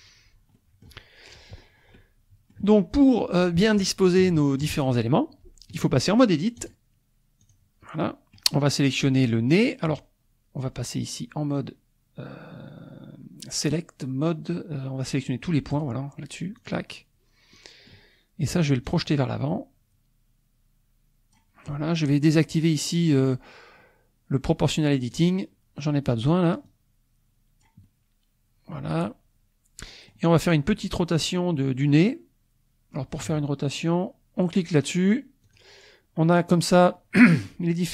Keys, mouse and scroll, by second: 0.6 middle click, 1.6 scroll up 1, 2.0 middle click, 4.3 shift+click, 4.3 shift+middle click, 6.6 click, 7.4 click, 8.0 middle click, 15.7 click, 16.7 click, 17.5 middle click, 18.9-21.6 drag, 25.2 click, 26.1 middle click, 26.8-27.8 drag, 27.8-30.3 middle drag, 30.9 middle click, 31.6-33.3 middle drag, 35.4 click.